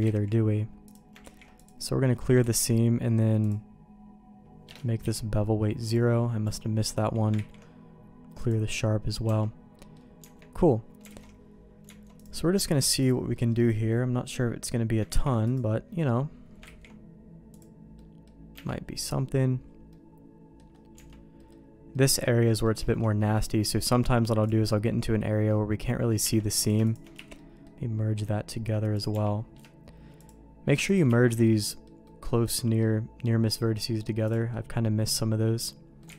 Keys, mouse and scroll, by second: 0.0 ctrl+z, 0.9 click, 1.2 ctrl+e, 2.7 ctrl+e, 5.0 n, 6.0 click, 6.5 middle click, 7.4 ctrl+e, 9.3 Tab, 9.8 middle click, 10.2 Tab, 11.1 alt+a, 12.2 click, 13.0 ctrl+click, 13.3 middle click, 15.1 ctrl+e, 16.8 ctrl+e, 18.0 middle click, 18.5 Tab, 19.9 middle click, 20.9 Tab, 21.4 middle click, 21.9 middle click, 22.5 middle click, 22.8 shift+middle click, 23.6 middle click, 24.7 middle click, 26.2 Tab, 26.6 click, 26.9 shift+click, 27.2 1, 27.4 middle click, 28.9 click, 29.1 g, 30.2 click, 30.9 shift+click, 31.1 shift+1, 31.4 middle click, 32.0 middle click, 32.8 middle click, 34.1 1, 34.3 click, 34.5-36.0 middle drag.